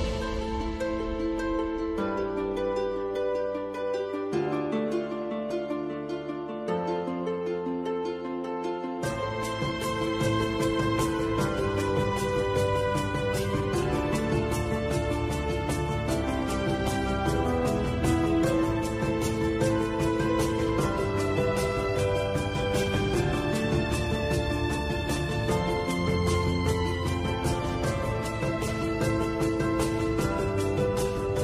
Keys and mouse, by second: 1.6 z, 2.6-3.8 middle drag, 4.0-5.1 middle drag, 5.7 middle click, 6.5 ctrl+r, 9.1 ctrl+b, 19.4 KP_7, 21.4 middle click, 23.3-24.3 middle drag, 26.3-27.8 middle drag, 28.7-30.6 middle drag.